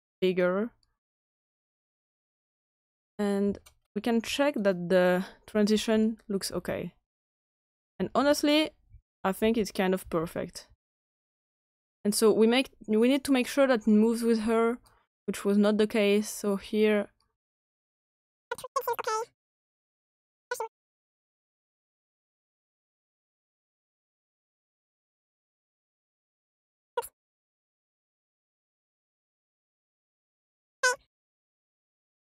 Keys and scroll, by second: 5.7 Right, 6.4 Right, 7.1 Right, 7.7 Right, 8.8 Left, 9.3 Left, 10.0 Left, 10.6 Left.